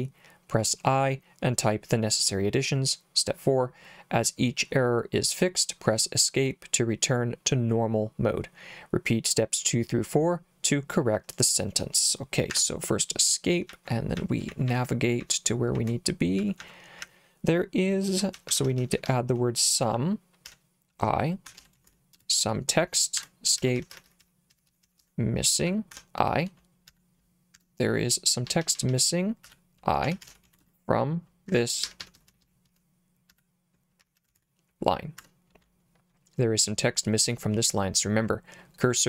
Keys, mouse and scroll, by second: 12.5 Escape, 13.7-22.4 typing, 23.2 Escape, 23.6-26.9 typing, 27.6 Escape, 28.5-34.9 typing, 31.5 Escape, 35.2 Escape.